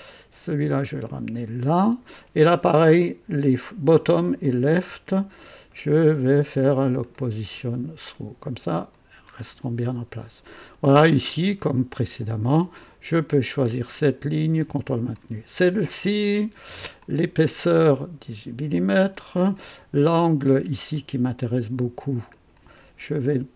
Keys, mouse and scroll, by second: 1.0-2.2 drag, 4.4 ctrl+click, 7.1 click, 8.1 click, 8.8 click, 9.3 scroll up 2, 9.8 right click, 10.5 scroll up 1, 11.0 right click, 13.8 click, 14.9 ctrl+click, 17.0 click, 18.7-19.7 drag, 20.9 click, 22.3 ctrl+click.